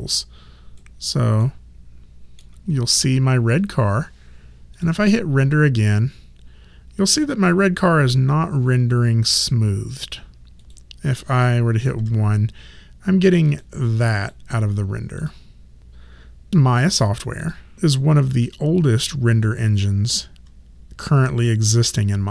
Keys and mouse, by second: 1.4 alt+middle click, 4.8 click, 10.6 click, 12.0 1, 13.5 click.